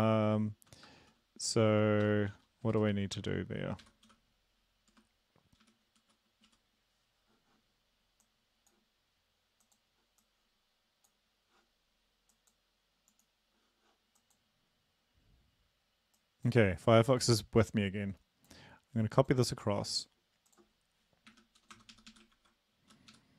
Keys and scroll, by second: 1.0-6.5 typing, 4.0 Right, 21.3 Home, 21.6 Return, 21.7 Return, 21.9 Up, 22.1 Up, 22.3 ctrl+v, 23.1 Up.